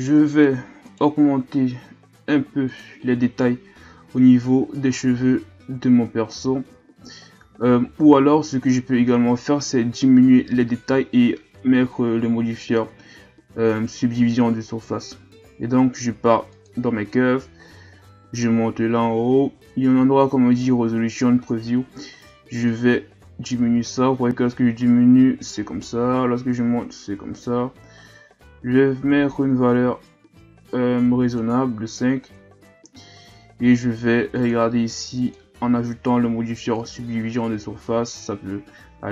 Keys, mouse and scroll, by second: 0.8 right click, 2.7 click, 5.0-6.0 scroll down 3, 6.0-7.0 scroll down 8, 8.1 scroll up 5, 12.4-13.7 scroll down 1, 16.5 click, 18.0-18.8 scroll up 2, 18.8-22.0 scroll up 5, 22.7-25.7 drag, 32.3 Tab, 32.9 Tab, 34.4 click, 35.2-38.2 drag.